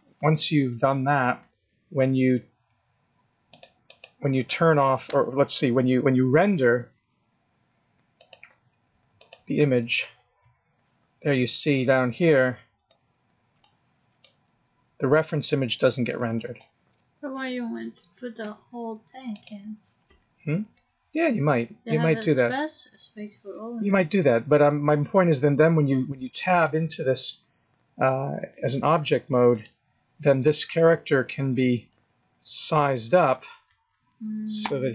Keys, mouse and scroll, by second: 3.5 click, 3.8 click, 8.2 click, 22.9-23.7 scroll down 4, 24.1-25.3 scroll up 1, 25.9 Tab, 27.8 Tab, 29.5 click, 30.8 g.